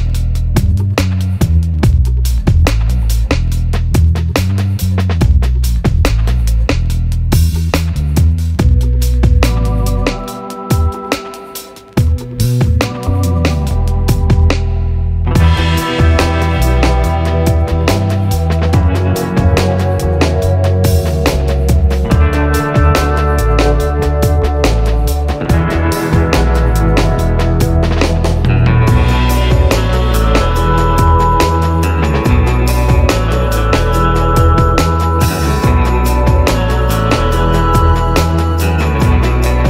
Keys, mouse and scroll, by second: 3.2 click, 3.5 scroll up 1, 4.8 middle click, 5.8-12.5 drag, 12.7 click, 16.9 click, 17.1 scroll up 1, 17.4 scroll, 18.3 click, 27.1-39.6 drag.